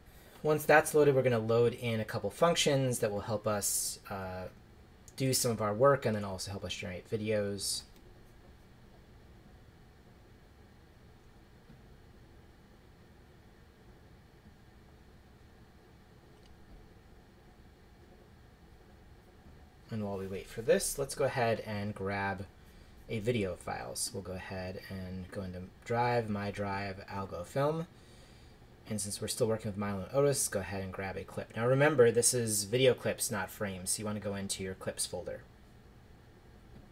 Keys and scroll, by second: 7.8 Return.